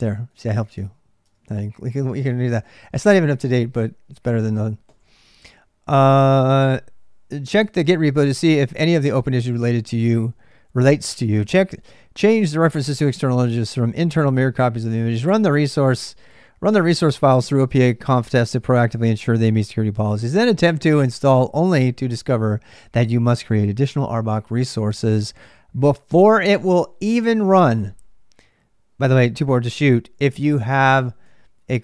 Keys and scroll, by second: 0.0-31.8 typing, 2.3 ctrl+[.